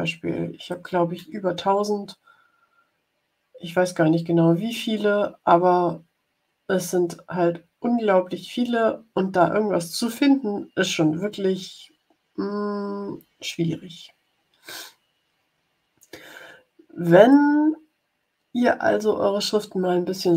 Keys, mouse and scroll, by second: 0.6-13.6 drag.